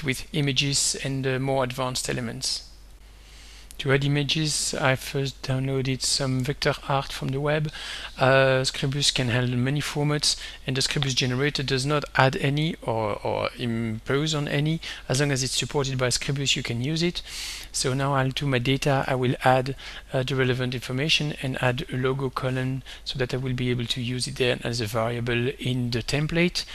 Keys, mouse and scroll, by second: 1.3 click, 3.0 click, 3.3 click, 4.8 alt+Tab, 6.8 click, 19.0 alt+Tab, 19.7 alt+Tab, 20.9 click, 21.2-22.8 typing, 23.5 click.